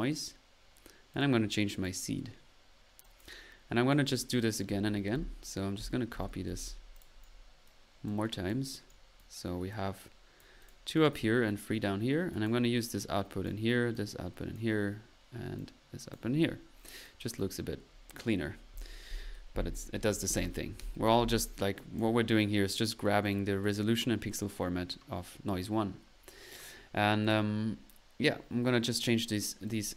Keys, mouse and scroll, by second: 1.1-1.4 drag, 1.2-1.9 typing, 1.7-2.0 drag, 2.6-3.0 middle drag, 3.0 click, 3.6-4.5 typing, 3.8 middle click, 3.9 right click, 4.0-4.3 drag, 4.6 right click, 5.1 ctrl+c, 5.8 ctrl+v, 6.2 ctrl+v, 6.5 ctrl+v, 6.7 typing, 7.2 click, 7.7 right click, 8.9 right click, 9.7 right click, 10.4 click, 11.4-11.9 middle drag, 12.3 click, 13.5 click, 13.9 click, 14.5 drag, 15.6 click, 17.0-17.7 drag, 21.8-22.2 drag, 22.4-23.0 drag, 23.0 right click, 23.2 drag, 23.6 click, 23.6 typing, 27.2 click, 28.8 click, 29.7 click.